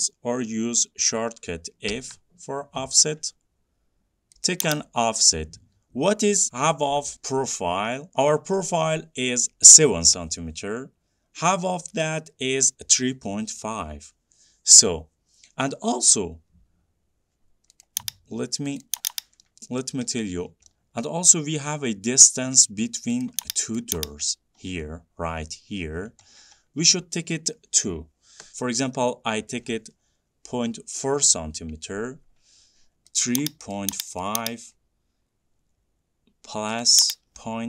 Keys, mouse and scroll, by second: 1.3 scroll, 2.2 f, 4.7 click, 18.1 click, 19.1 click, 19.3 click, 20.1 middle click, 20.3-20.7 middle click, 20.8-21.1 scroll, 23.5 click, 24.0 click, 24.5-25.1 scroll, 26.2 scroll, 26.3 scroll down 4, 26.5-27.0 scroll down 10, 28.5-28.9 scroll down 1, 29.3-31.8 scroll up 2, 31.8 scroll up 1, 32.8 scroll down 6, 32.9 click, 33.5 click, 34.0 click, 34.5 click, 37.1 click.